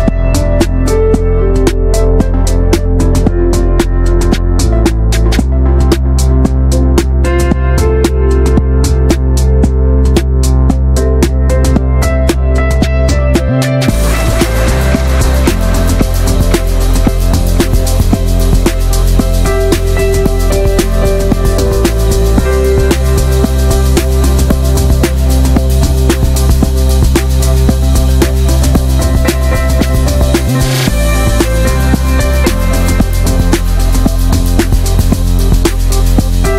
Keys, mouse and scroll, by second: 0.0 middle click, 0.5 shift+middle click, 0.8-1.9 scroll up 4, 1.0 shift+middle click, 1.9 scroll down 1, 2.0-2.5 shift+middle drag, 2.5 alt+shift+click, 3.0 ctrl+b, 5.9 scroll down 2, 6.0 Tab, 6.1 drag, 6.3 middle click, 6.5 ctrl+s, 6.6 click, 7.0 /, 7.2 drag, 7.5-8.5 middle drag, 8.5 ctrl+s, 8.6 drag, 8.8-9.4 middle drag, 9.4 ctrl+s, 9.6 shift+middle drag, 9.7 scroll up 1, 9.8-10.3 middle drag, 10.3 ctrl+s, 10.4 drag, 10.5 scroll down 5, 10.8-11.9 shift+middle drag, 11.9 ctrl+s, 12.0 click, 12.1 scroll up 1, 12.2 middle drag, 12.4 shift+a, 13.9 scroll down 2, 14.1 shift+middle click, 14.3-14.9 shift+scroll up 2, 14.9-16.7 drag, 17.0 right click, 17.6 right click, 18.3 click, 19.0 alt+middle click, 19.3 scroll down 4, 19.5-19.9 shift+middle drag, 19.9 click, 20.2-20.6 scroll up 3, 20.3 shift+middle drag, 20.6 s, 21.2 alt+middle click, 21.3 alt+z, 21.7 click, 22.2 alt+z, 22.4 shift+middle click, 22.6 scroll up 2, 23.3 shift+middle drag, 23.4 shift+scroll up 1, 23.5 r, 24.5 shift+middle drag, 24.6 shift+scroll up 2, 24.8 s, 26.9 shift+middle drag, 27.0 scroll up 2, 27.2 s, 28.1-28.6 drag, 28.6 alt+middle click, 29.2 scroll down 1, 29.3 shift+middle click, 29.4 scroll up 1, 29.6 s, 31.7 middle drag, 32.0 ctrl+s, 32.2-32.5 shift+middle drag, 32.5 ctrl+s, 33.2 alt+middle click, 33.4 ctrl+s, 33.9 shift+middle drag, 34.2 ctrl+s, 35.0 shift+middle click, 35.9-36.4 drag, 36.4 Tab.